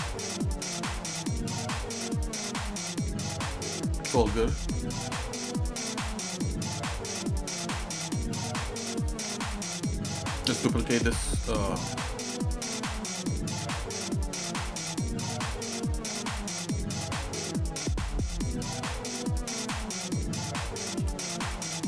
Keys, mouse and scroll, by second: 0.2 middle click, 0.7 shift+middle click, 1.2 middle click, 1.6 middle click, 2.1-4.5 shift+middle drag, 4.8 shift+middle click, 5.2 middle click, 6.0 shift+middle click, 7.1 middle click, 7.7 shift+middle click, 8.3 middle click, 9.5 scroll down 1, 10.8 a, 11.7 shift+middle click, 12.2 middle click, 13.6 shift+d, 15.4 shift+middle click, 16.6 shift+middle click, 17.1 scroll up 2, 17.5 scroll down 1, 18.4 click, 21.0 g.